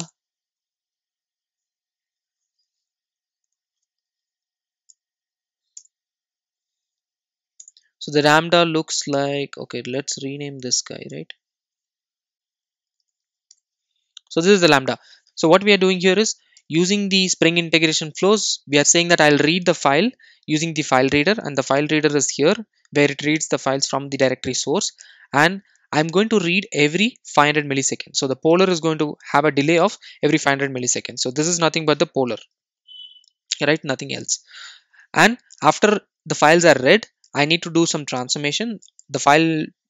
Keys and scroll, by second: 2.3 alt+Return, 3.9 alt+Return, 4.9 alt+Return, 12.3 shift+F6, 16.6 alt+super+l.